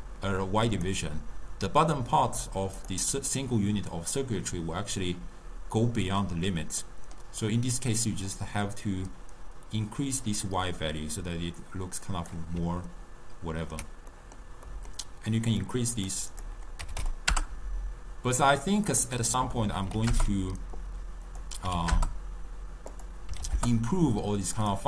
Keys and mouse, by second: 2.0 click, 2.9 click, 7.0-8.4 middle drag, 8.4-11.5 drag, 13.0-15.7 ctrl+middle drag, 15.7 click, 16.0 click, 16.4-24.8 drag.